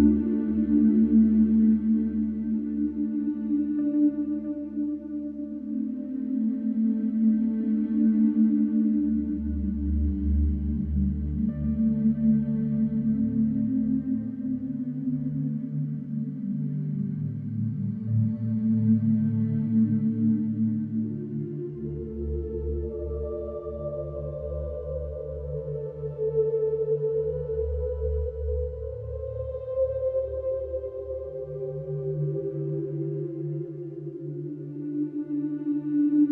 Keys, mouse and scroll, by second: 0.4 click, 4.6 ctrl+a, 6.8 click, 8.5 click, 9.8 middle click, 10.7 click, 11.1 middle click, 14.4 click, 17.1 right click, 18.3 click, 19.6 KP_Subtract, 20.4 KP_5, 20.9 KP_4, 21.3 KP_0, 22.8 click, 25.6 ctrl+v, 27.2 click, 29.1 right click, 29.9 click, 32.5 alt+q.